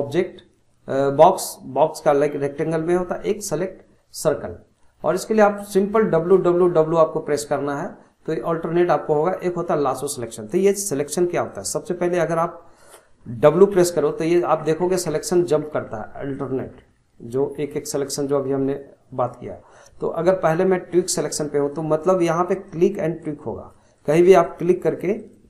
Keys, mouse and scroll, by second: 11.6 scroll down 2, 11.9-13.7 middle drag, 13.7-19.3 typing, 22.5 click, 23.2 click, 24.0 click, 24.4 click, 24.9 click, 25.2 click.